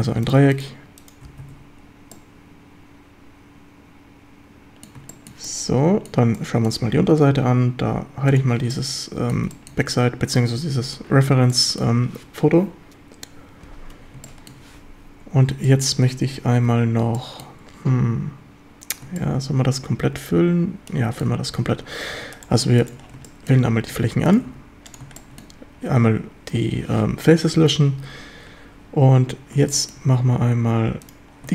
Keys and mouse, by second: 1.5 f, 1.5 a, 2.2-4.9 drag, 5.1 shift+drag, 5.5-6.1 drag, 6.4-6.7 drag, 8.3 click, 8.7-9.4 middle drag, 9.5 shift+middle drag, 11.5-11.9 shift+middle drag, 14.3 shift+middle drag, 15.7 shift+middle click, 17.2 shift+middle drag, 19.2-21.2 shift+middle drag, 22.2 3, 23.3 middle drag, 24.5 x, 25.2 middle drag, 29.7 shift+middle drag.